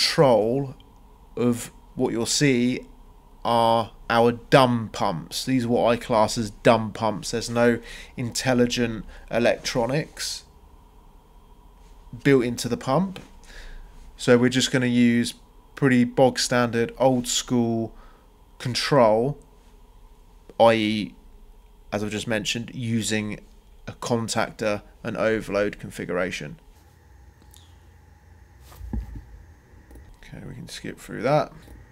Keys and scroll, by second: 16.2 ctrl+c, 16.4 ctrl+v, 24.2-25.9 typing, 27.2-31.9 typing, 28.0 shift+Return, 29.9 Return.